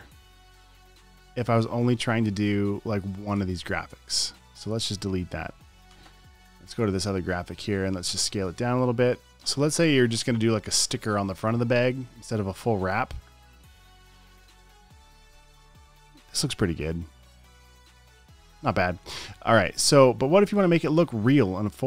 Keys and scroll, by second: 6.3 BackSpace.